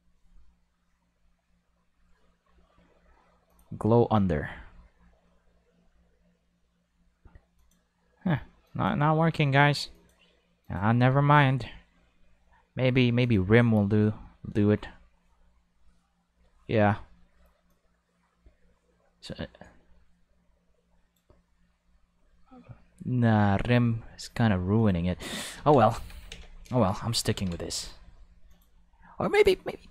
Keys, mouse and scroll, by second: 3.5 click, 7.6 click, 8.6 click, 9.9 click, 10.6 click, 13.2 click, 17.7-21.1 drag, 24.8 click, 25.5 ctrl+5, 25.9 alt+a, 26.1 5, 27.3 ctrl+5, 27.6 right click, 28.5 click, 29.3 click.